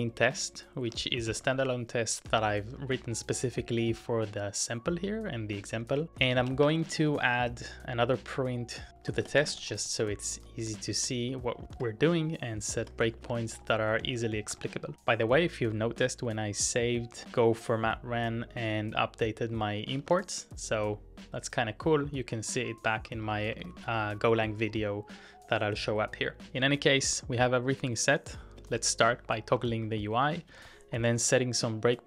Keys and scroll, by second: 0.6-1.5 typing, 2.7-3.1 typing, 5.4-7.3 typing, 8.9-15.1 typing, 19.8-20.7 typing, 23.5-24.6 typing, 28.4-32.0 typing.